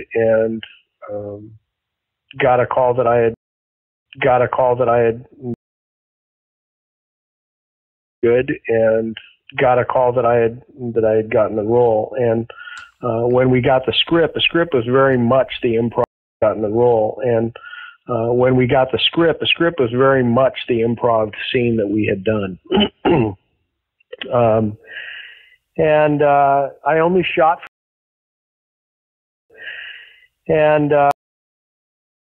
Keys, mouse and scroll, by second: 2.0-3.3 drag, 3.3 space, 3.8 ctrl+shift+Delete, 4.0 space, 4.9 click, 5.4 space, 5.7 click, 6.5-7.6 drag, 8.0 click, 8.1 space, 10.5 ctrl+s, 11.6-13.3 drag, 13.6 click, 14.5 click, 15.4 click, 15.9 space, 16.2 click, 16.3 space, 19.6 ctrl+s, 23.7-28.5 drag, 27.6 space, 29.1 ctrl+shift+Delete, 29.4 space, 30.5 click, 31.0 space, 31.3 click, 32.0 click.